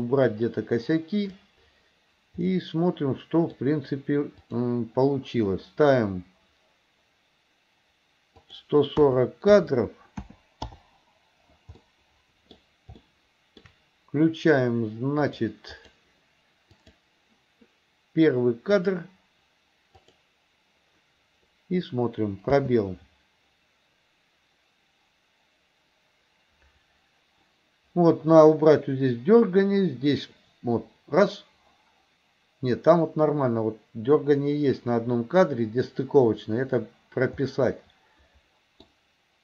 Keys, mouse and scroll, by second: 2.5-3.6 middle drag, 4.5 click, 8.5-10.8 drag, 11.8-12.5 middle drag, 13.0-13.7 shift+middle drag, 15.3 click, 15.8 click, 16.8 click, 18.8 click, 20.0 click, 22.6 space, 37.5-39.0 middle drag.